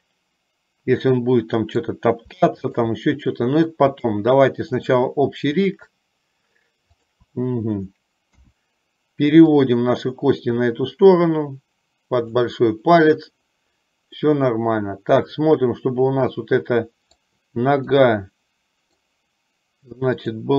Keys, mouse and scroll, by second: 2.8 shift+click, 4.0 shift+click, 4.9 shift+click, 5.7 shift+click, 7.0 shift+click, 8.5 KP_1, 9.8-12.4 drag, 14.3-17.4 middle drag, 18.0-19.3 middle drag.